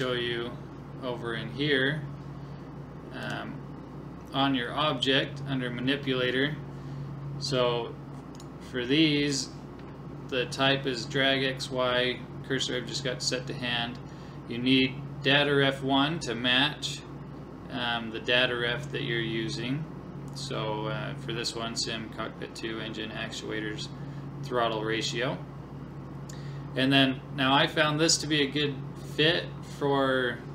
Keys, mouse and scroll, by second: 0.0 click, 3.2 click, 5.4-6.5 scroll up 1, 6.5-7.5 scroll down 1, 7.5 scroll down 1, 8.4-10.2 right drag.